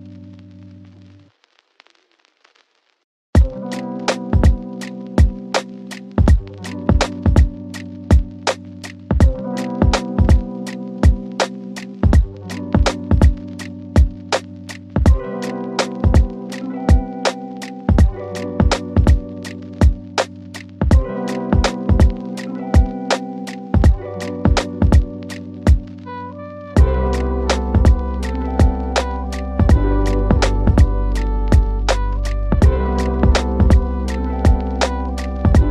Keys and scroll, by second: 0.5 ctrl+Page_Down, 7.5 Escape, 9.9 KP_Add, 31.0 ctrl+Page_Down.